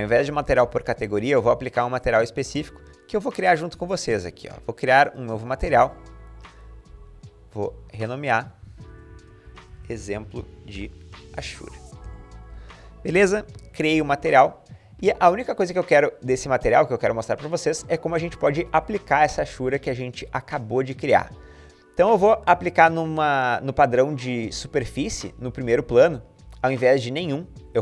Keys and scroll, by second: 8.8-12.3 typing.